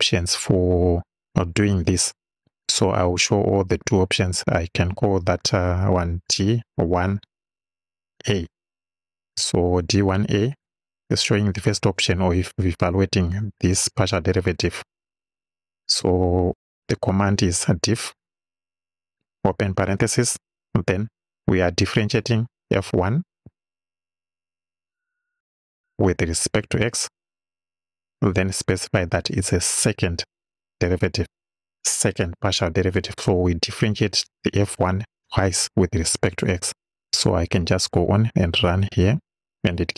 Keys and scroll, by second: 5.1 d, 6.8 1, 8.2 a, 10.6 =, 17.5 d, 18.1 i, 19.5 shift+f, 19.8 shift+9, 22.8 f, 23.5 1, 26.7 x, 28.3 ,, 31.2 2.